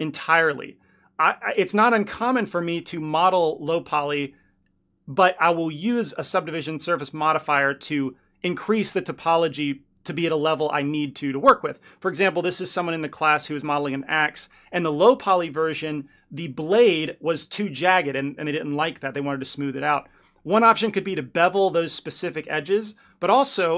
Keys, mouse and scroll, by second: 1.6 ctrl+click, 2.4 s, 4.4 click, 5.1 ctrl+click, 5.4 shift+click, 6.3 s, 8.2 click, 9.0 ctrl+click, 9.8 s, 11.4 Tab, 15.9 click, 20.7 click, 21.8 Tab, 23.0 1.